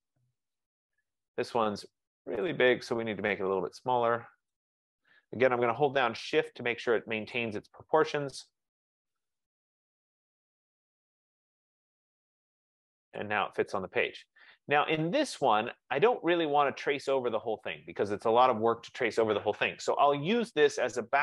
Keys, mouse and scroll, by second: 0.5 click, 2.8 click, 6.2 click, 7.4 shift+click, 10.9 click, 13.2 click, 15.8 click, 18.6 click, 20.3 click.